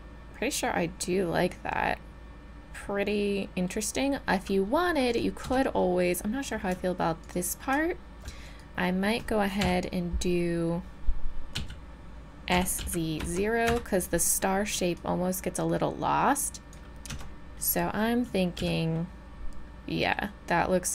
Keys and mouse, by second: 2.2-2.6 middle drag, 5.1 right click, 5.5 Tab, 9.6 KP_3, 11.5 z, 12.5 s, 15.0-17.6 drag, 17.5 Tab, 18.6 z.